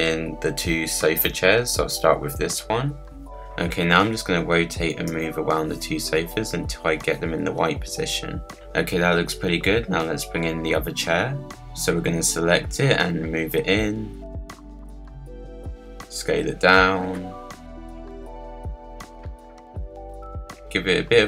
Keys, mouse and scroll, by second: 0.1-1.8 middle drag, 1.8 click, 3.2 click, 3.6 scroll up 5, 3.9 scroll down 1, 4.0 middle click, 4.2 r, 4.8 scroll down 2, 4.9 scroll up 2, 5.1 click, 6.1 click, 6.3 z, 6.6 s, 7.0 click, 7.4-8.5 drag, 8.7 scroll down 4, 9.0-10.0 middle drag, 10.0 scroll up 1, 10.1-10.7 scroll down 2, 10.4 middle click, 10.7-11.5 middle drag, 11.5 click, 12.4-14.1 drag, 14.8 click, 15.8 s, 18.9 KP_Decimal, 19.3 scroll down 4, 19.6 s, 20.2 scroll down 2, 20.3 middle click, 20.8 r.